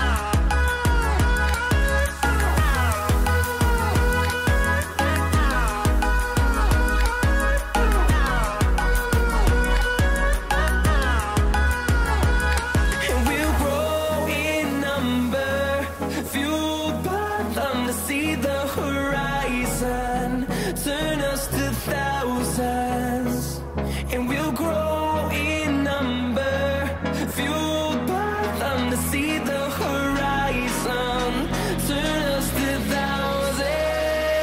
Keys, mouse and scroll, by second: 0.5 click, 1.4-2.3 scroll down 1, 2.7 scroll up 1, 3.5-5.5 drag, 8.3-9.0 scroll up 1, 9.0 click, 9.7-10.6 scroll down 1, 11.1 ctrl+z, 11.5-12.0 scroll up 1, 12.0 click, 12.0 typing, 13.1 scroll down 1, 13.9-14.5 scroll up 1, 14.5 click, 15.4 scroll down 1, 17.3 click, 17.9-18.3 scroll down 1, 19.6 click, 19.7-32.6 drag.